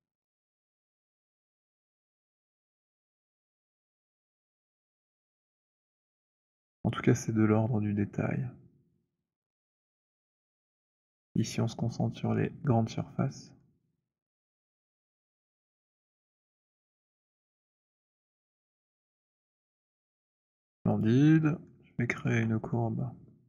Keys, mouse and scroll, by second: 0.6 alt+click, 2.1 right click, 3.4 click, 5.1-7.3 typing, 7.1 middle click, 7.5 middle click, 9.4 middle click, 11.0-14.7 typing, 12.5 middle click, 14.4 middle click, 16.6-17.5 c, 17.5-18.4 scroll, 18.4-19.3 scroll, 20.6 right click, 20.8 click, 21.3 alt+scroll, 22.4 alt+right click.